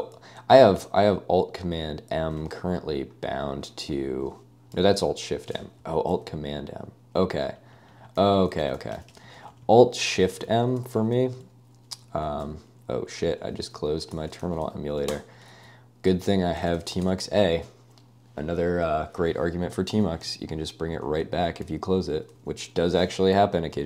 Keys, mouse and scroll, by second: 6.1 alt+super+m, 7.6 alt+super+i, 7.8 alt+super+i, 7.9 alt+super+i, 8.2 alt+super+m, 8.3 alt+super+m, 9.1 alt+super+i, 9.1 alt+super+i, 9.3 alt+super+i, 10.0 alt+super+m, 10.2 alt+super+m, 10.8 super+w, 11.2 super+w, 12.1 alt+a, 13.4 alt+a, 14.0 Escape, 14.2-15.1 typing, 16.3-17.5 typing, 20.3-22.8 typing.